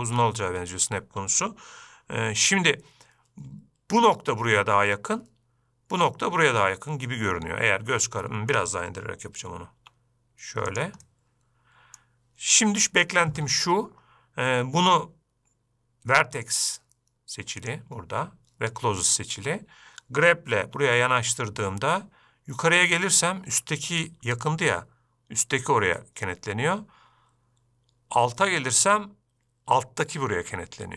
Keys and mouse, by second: 7.7-8.9 middle drag, 10.2 g, 11.4-12.4 middle drag, 18.2-19.8 drag, 21.1 g.